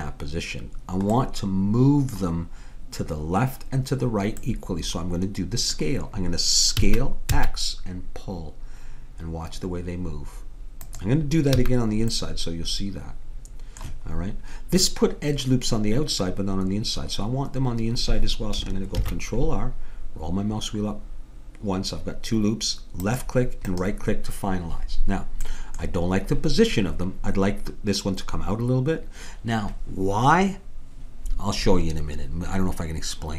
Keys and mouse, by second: 6.8 s, 11.6 a, 12.2-13.6 middle drag, 19.0 ctrl+r, 25.5-28.3 middle drag.